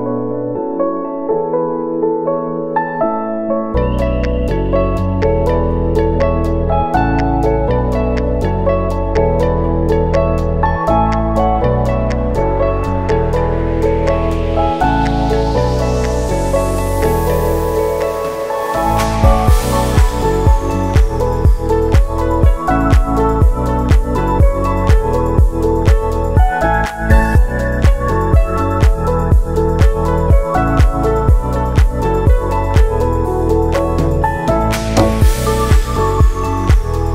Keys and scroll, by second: 3.4 space, 3.8 ctrl+s, 31.1 ctrl+s.